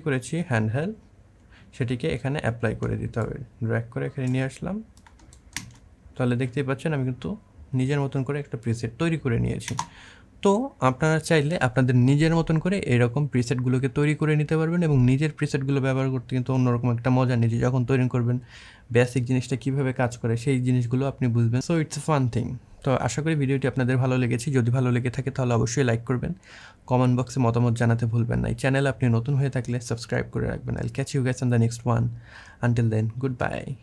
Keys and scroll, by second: 5.4 space, 9.5 space.